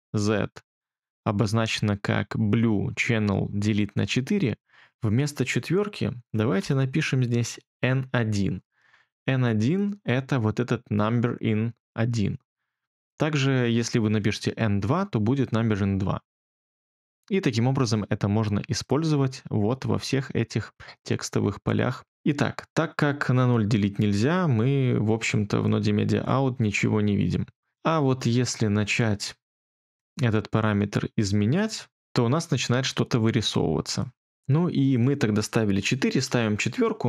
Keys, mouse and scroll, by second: 6.5 BackSpace, 7.5-8.4 typing, 9.9-11.2 typing, 36.0 4, 36.2 Return.